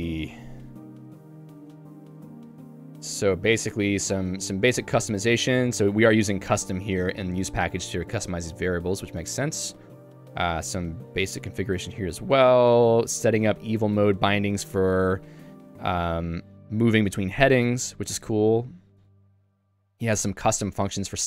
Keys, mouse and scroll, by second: 3.5 k, 6.3 shift+v, 6.9 Escape, 7.4 ctrl+u, 7.8 ctrl+d, 8.1 j, 13.2 k, 14.8 Escape, 15.1-19.4 typing.